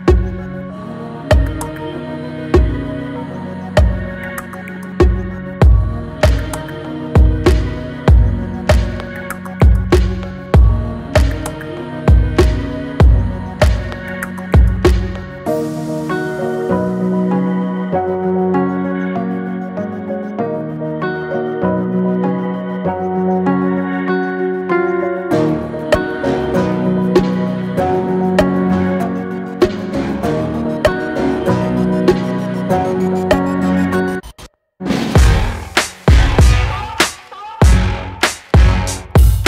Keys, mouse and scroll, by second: 1.1-1.5 scroll down 1, 1.5-2.5 middle drag, 2.5 alt+e, 6.4 Tab, 6.8-8.6 middle drag, 8.6 Tab, 9.0 scroll up 2, 9.5 scroll down 1, 10.3 ctrl+r, 12.0 middle click, 12.7 ctrl+r, 14.6 alt+shift+click, 15.2 middle click, 16.0 alt+shift+click, 16.6 alt+shift+click, 18.0 ctrl+b, 21.4-23.1 middle drag, 23.1 alt+e, 26.0-26.6 middle drag, 26.6 scroll down 2, 26.8-28.8 middle drag, 30.9 Tab, 31.2-32.0 middle drag, 32.0 scroll down 1, 32.3-34.2 middle drag, 34.8 click, 35.1 click, 35.4-36.4 middle drag, 36.4 click, 36.8-37.5 middle drag, 37.5 scroll up 2, 37.9-38.8 middle drag, 38.8 s.